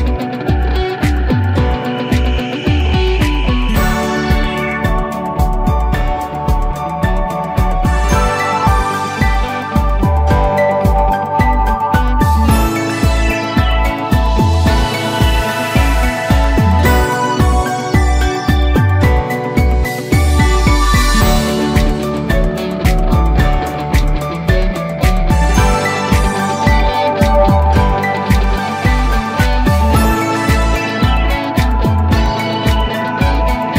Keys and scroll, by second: 10.3 Up.